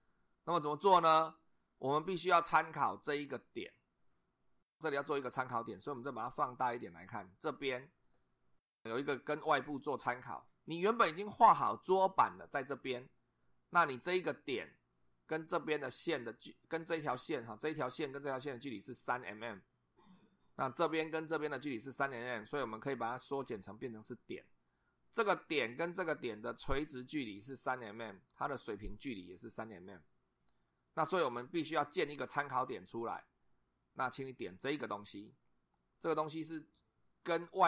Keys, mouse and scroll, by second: 5.9 scroll up 1, 6.5 scroll up 1, 8.6 scroll down 1.